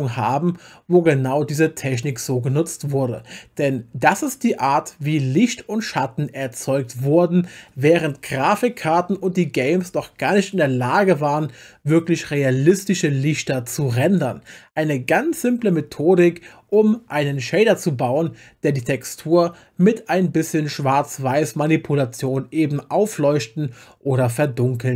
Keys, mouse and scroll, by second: 1.9 click.